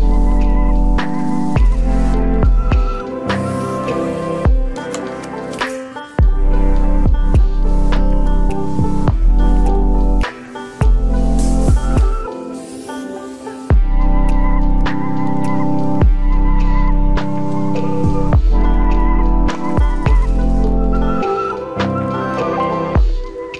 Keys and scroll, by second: 7.5 ctrl+u.